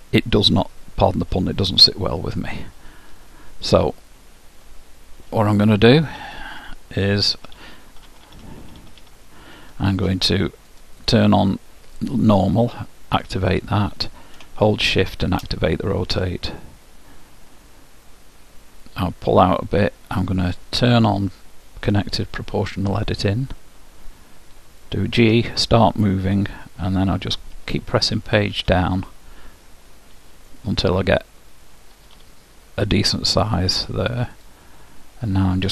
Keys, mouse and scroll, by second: 5.4-6.3 typing, 7.4-9.1 typing, 10.8-12.7 drag, 13.3-16.7 drag, 18.7-20.9 middle drag, 20.9-22.8 drag, 25.3 g, 34.9-35.7 middle drag.